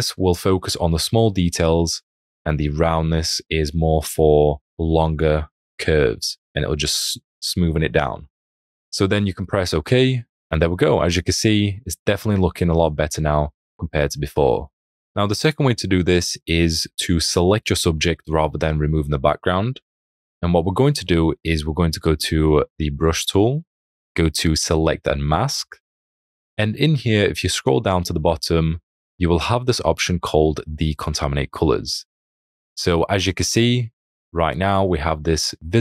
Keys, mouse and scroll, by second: 10.5 alt+scroll, 12.3 alt+space, 13.6 alt+scroll, 14.6 alt+space, 16.0 space, 16.2 click, 35.7 space.